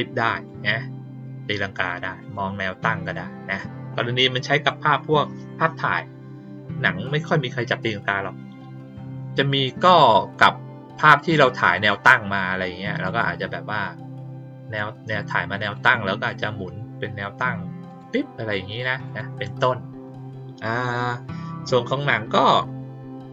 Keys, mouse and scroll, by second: 0.3 click, 1.7 click, 2.1 click, 14.6 click, 15.6 click, 17.8 click, 19.0 click.